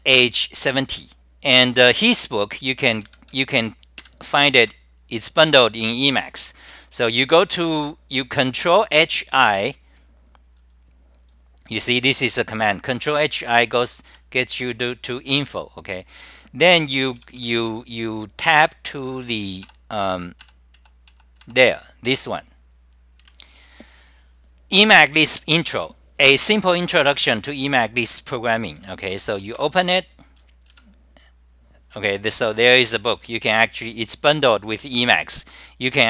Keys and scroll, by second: 4.6-5.3 typing, 17.2 t, 17.4 t, 19.2 Tab, 19.6 Tab, 20.0 Tab, 20.4 Tab, 20.9 Tab, 21.1 Tab, 21.4 Tab, 22.2 2, 23.4 =, 31.0 Return, 33.2-33.8 scroll down 9, 35.6 scroll down 9, 35.6 typing.